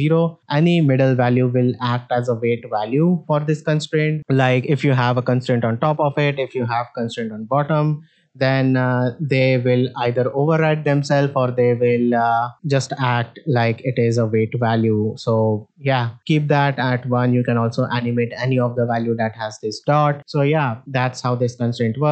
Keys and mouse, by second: 9.3-12.5 drag, 12.8-15.0 ctrl+drag, 16.2 click, 20.9-21.2 middle drag.